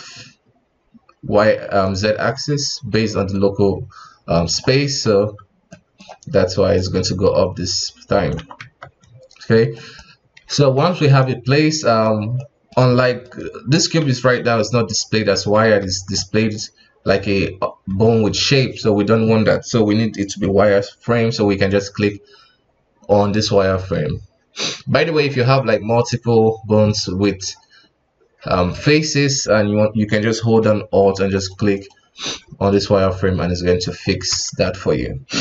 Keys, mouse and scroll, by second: 4.8 KP_1, 5.7-6.7 middle drag, 6.7-8.4 drag, 8.4 KP_1, 8.6 Tab, 9.7 right click, 10.6 ctrl+Tab, 11.0 right click, 11.6-12.0 middle drag, 12.0-12.4 scroll up 1, 12.4-14.0 middle drag, 14.0 KP_1, 14.7-15.8 middle drag, 15.8 ctrl+s, 16.2-19.2 middle drag, 21.7 click, 24.9 scroll down 2, 25.1 a, 25.3 middle click, 25.6-27.3 scroll up 2, 27.3-29.2 scroll up 2, 31.3 alt+click, 31.7 alt+click, 32.7-33.1 middle drag, 33.1-33.9 scroll up 2, 33.9 scroll down 3, 34.1 alt+a, 34.4 KP_1.